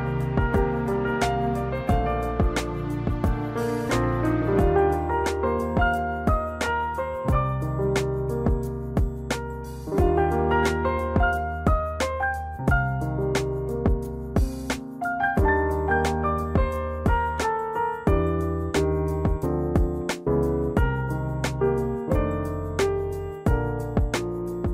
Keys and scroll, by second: 10.1 space, 22.9 -.